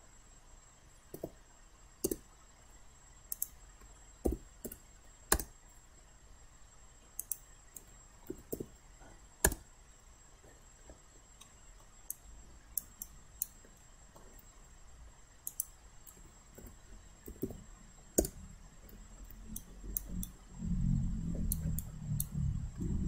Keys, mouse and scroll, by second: 1.2 8, 2.1 Return, 3.4 click, 4.7 1, 5.4 Return, 7.2-8.2 drag, 8.1-9.1 typing, 9.5 Return, 11.4 alt+middle click, 12.1 alt+click, 13.0 alt+right click, 13.8 alt+middle click, 15.5 click, 16.6-17.9 typing, 18.2 Return, 19.6 alt+right click, 20.2 alt+right click, 21.8 alt+right click, 22.8 alt+middle click.